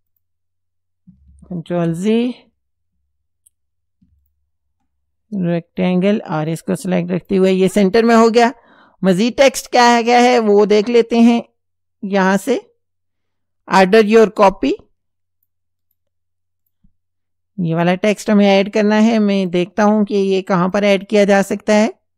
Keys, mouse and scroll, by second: 0.1 click, 1.7 ctrl+z, 4.2 ctrl+click, 6.5 click, 7.2 click, 10.0 click, 12.1 click, 14.1-15.7 drag, 15.9 right click, 16.7 click, 17.8 click, 19.4 click, 20.7 click.